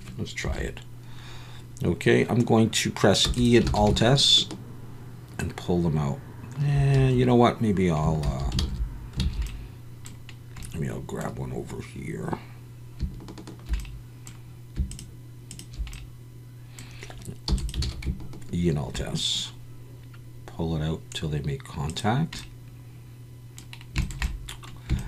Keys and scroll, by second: 0.4 KP_1, 3.3 e, 3.6 alt+s, 7.0 Escape, 8.3 ctrl+z, 8.6 ctrl+z, 9.3 ctrl+z, 17.5 e, 17.8 alt+s.